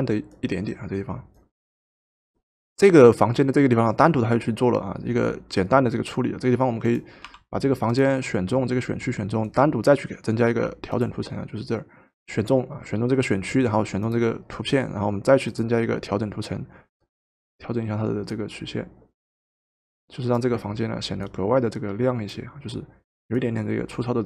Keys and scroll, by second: 7.4 w, 12.1 ctrl+z.